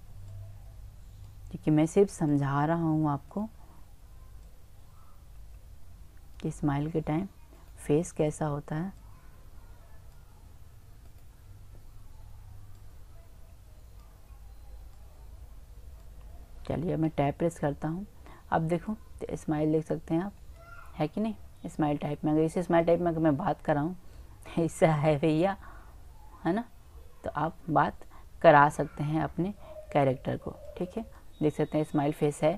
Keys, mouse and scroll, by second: 0.3-1.6 right drag, 1.6-2.1 drag, 2.3-3.3 drag, 3.3-4.1 right drag, 4.5 right click, 11.1-11.8 right drag, 12.8 click, 12.8 right click, 14.0-14.4 drag, 14.9-16.6 drag, 17.1 Tab, 17.4-20.3 drag, 21.0-22.8 middle drag, 25.8 click, 29.2-31.6 drag, 31.6 middle click, 32.2 click.